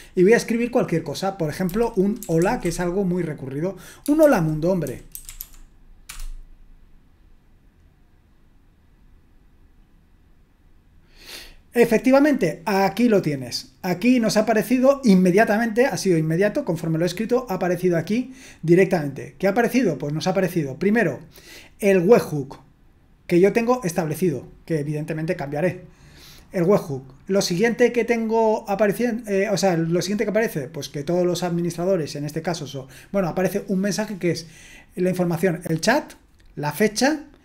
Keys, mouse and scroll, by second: 1.4-3.1 typing, 4.2-5.9 typing, 6.1 Return, 35.4 click.